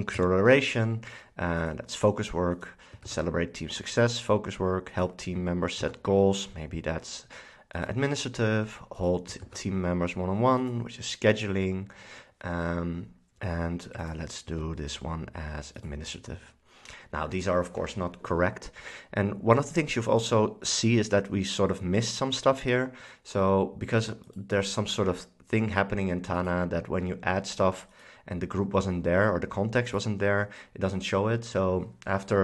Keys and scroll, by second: 0.3 super+x, 3.2 super+x, 5.9 super+x, 9.5 super+x, 14.6 super+x.